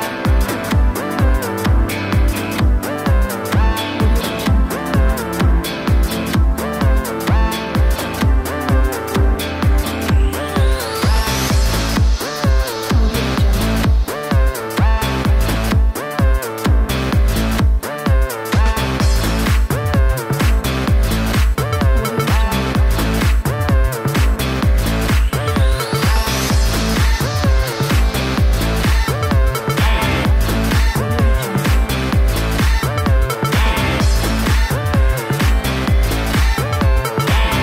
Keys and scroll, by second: 9.6 Delete, 12.3-15.8 typing.